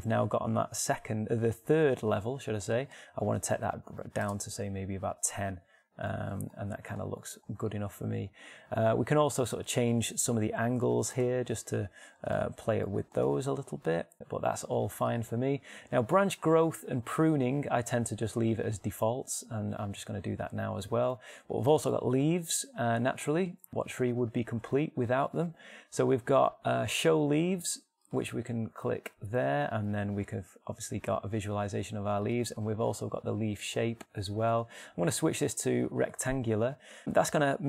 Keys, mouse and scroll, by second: 3.5-5.5 drag, 10.3-12.8 drag, 13.4-14.9 drag, 15.9-17.9 drag, 26.3-31.3 drag, 32.9-35.0 drag, 35.0-37.6 middle drag.